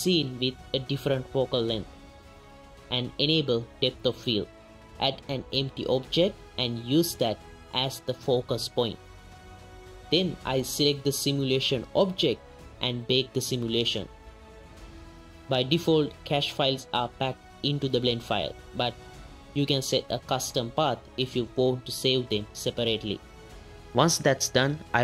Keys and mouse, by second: 0.3-1.4 drag, 1.6-1.9 ctrl+drag, 2.2 r, 2.5 r, 2.6 ctrl+click, 2.8 shift+click, 2.9 shift+z, 3.1 shift+a, 5.4 click, 6.0-7.1 drag, 7.5 z, 7.9 click, 9.1 click, 9.6 space, 11.0 click, 13.4 click, 18.3 click, 18.8 click, 19.5-20.1 drag, 20.6-21.5 drag, 23.5 click.